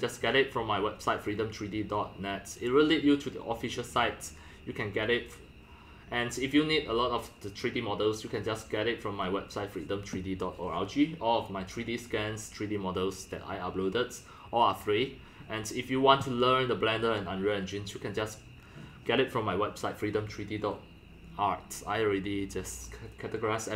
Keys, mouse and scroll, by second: 15.5 click.